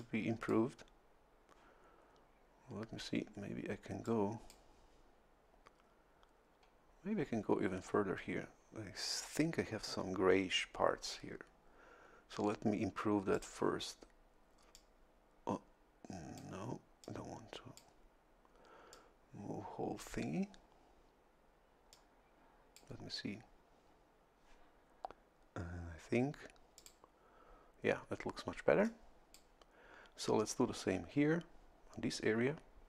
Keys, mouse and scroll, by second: 0.0 click, 4.0 click, 13.3 click, 14.7-16.6 drag, 17.0 click, 18.9-20.2 drag, 21.9-23.0 drag, 26.7 click, 28.8 click.